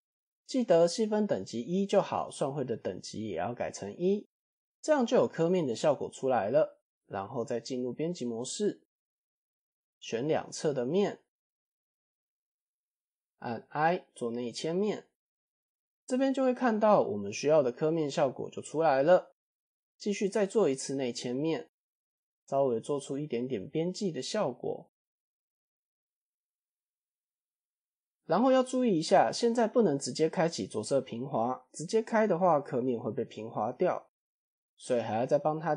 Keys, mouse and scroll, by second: 2.2 click, 3.2 KP_1, 4.2-4.6 middle drag, 5.2-5.7 middle drag, 6.3 Tab, 6.7 middle drag, 7.2 click, 8.1 alt+click, 8.8 click, 8.8 scroll down 1, 9.2 3, 10.0 alt+click, 10.9 middle click, 11.6 shift+click, 12.0-12.4 middle drag, 12.4 scroll down 1, 12.9 scroll up 1, 13.7 scroll up 3, 13.9 i, 15.5 middle click, 16.6 middle click, 17.0-18.1 scroll down 1, 18.1-19.2 middle drag, 23.1 middle drag, 23.4 Tab, 23.8 middle click, 24.6-25.3 middle drag, 24.6 scroll up 1, 25.4-26.2 scroll down 2, 25.6-26.3 middle drag, 27.7-28.2 scroll up 2, 28.3 scroll down 1, 28.4 scroll down 1, 29.3 middle click, 29.9-30.7 right drag, 31.2 middle drag, 32.7-33.8 right drag, 34.1-34.4 middle drag.